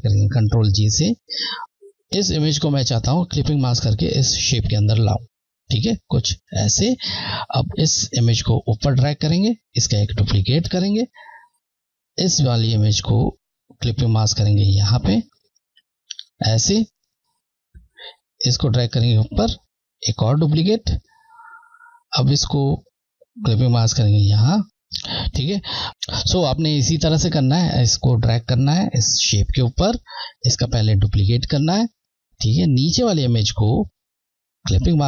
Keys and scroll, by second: 0.0 Left, 0.6 ctrl+j, 1.6 z, 6.5 Left, 8.0 Left, 10.9 ctrl+j, 12.2 Left, 15.7 Left, 18.4 Left, 20.6 ctrl+j, 21.8 Left, 28.1 Left, 31.7 ctrl+j, 33.0 Left, 34.9 Left.